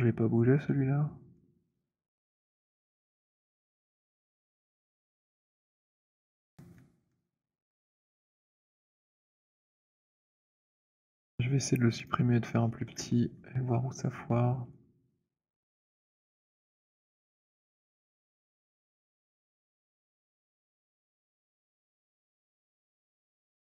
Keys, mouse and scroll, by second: 0.7-6.3 typing, 4.1 middle click, 6.5 middle click, 8.7 alt+middle click, 8.9 alt+middle click, 9.4 alt+click, 9.8 alt+middle click, 11.0-11.8 alt+scroll, 12.1 click, 12.2 alt+middle click, 12.9 Delete, 13.7-15.3 scroll, 16.2 click, 18.1 click, 20.4 click, 22.5 click, 23.4 Return.